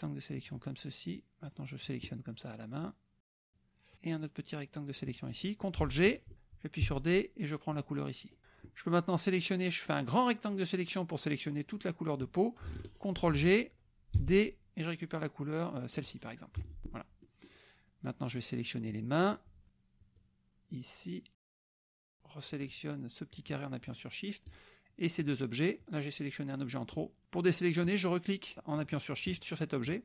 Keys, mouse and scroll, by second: 1.0 shift+click, 1.4 shift+click, 1.8 shift+click, 2.9 shift+click, 3.9-5.1 shift+drag, 6.3 ctrl+g, 6.9 d, 7.7 click, 8.3 click, 8.4 F1, 9.9-11.6 drag, 13.1 ctrl+g, 14.1 d, 15.9 click, 16.6 F1, 16.9 click, 18.3-19.4 drag, 20.1-21.7 shift+drag, 24.6 shift+click, 25.3 shift+drag, 26.9 shift+click, 27.8 shift+click, 29.4 shift+click, 29.5-30.0 shift+middle drag.